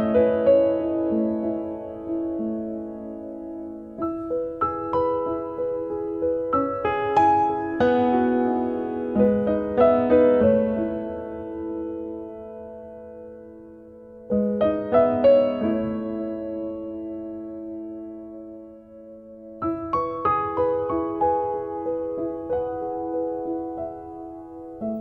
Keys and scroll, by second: 2.3 Return, 2.6 0, 3.1 Return, 6.0 2, 6.5 0, 7.0 Return, 8.3 space, 11.4 r, 12.4 space, 17.2 p, 18.3 3, 18.6 5, 19.2 Return, 20.0 space, 23.1 m.